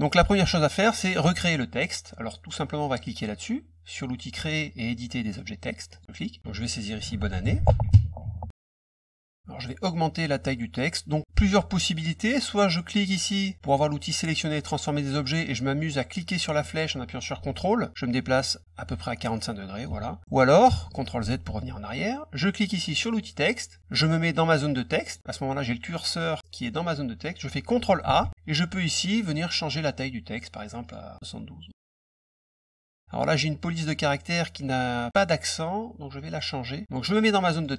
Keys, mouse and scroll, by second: 5.9 click, 7.0-8.7 typing, 9.0 click, 16.1-19.8 drag, 20.6 ctrl+z, 22.9 click, 24.6 click, 28.0 ctrl+a, 28.9 click, 30.8 click, 31.9 click, 32.4 click, 36.2 click, 37.5 click.